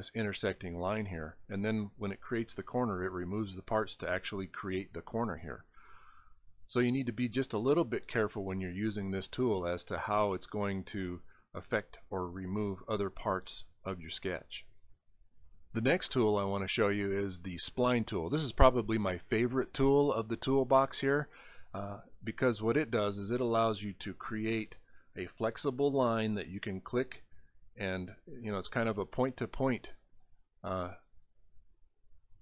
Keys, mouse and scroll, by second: 0.8 click, 3.3 scroll up 2, 8.3 click, 8.3 right click, 17.6 click, 22.4 click, 23.1 click, 23.8 click, 24.5 click, 25.1 drag, 25.6 click, 26.3 click, 26.9 click, 27.6 click, 28.3 click, 28.9 click, 29.5 click, 30.0 click, 30.5 click, 31.0 click, 31.5 click.